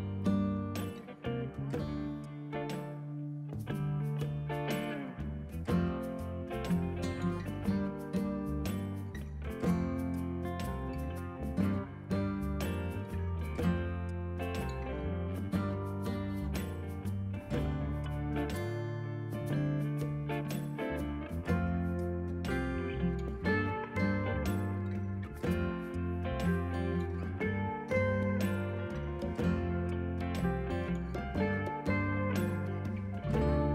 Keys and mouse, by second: 2.0 click, 2.2 ctrl+shift+a, 2.5 click, 3.7 ctrl+shift+x, 3.8 click, 4.3 Escape, 5.1 ctrl+q, 5.3 click, 6.8 Escape, 6.9 click, 8.9 ctrl+1, 9.8 click, 10.0 ctrl+click, 10.4 click, 12.4 a, 12.6 click, 13.2 ctrl+1, 13.3 click, 14.7 ctrl+s, 15.0 click, 19.1 ctrl+click, 19.5 click, 25.6 click, 26.2 ctrl+1, 26.4 ctrl+q, 26.6 click, 26.8 ctrl+1, 26.9 click, 27.1 ctrl+x, 27.2 click, 28.0 ctrl+1, 31.3 click, 32.0 click, 32.1 right click, 32.5 click, 33.6 ctrl+e.